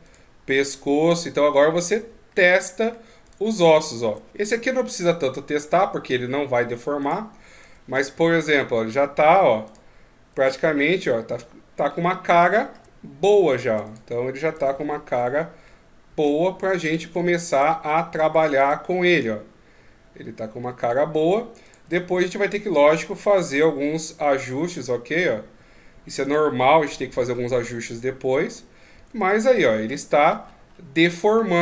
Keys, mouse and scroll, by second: 0.1 right click, 0.8 g, 2.3 middle click, 3.3 right click, 4.0 g, 7.0 right click, 7.7 g, 9.7 right click, 10.4 g, 12.5 middle click, 13.0 shift+scroll down 1, 13.9 right click, 14.6 r, 15.7 middle click, 16.5 shift+scroll down 1, 17.5 right click, 18.6 r, 21.7 right click, 22.0 shift+scroll down 1, 23.5 r, 26.3 right click, 26.9 r, 29.4 middle click, 30.1 shift+scroll up 1.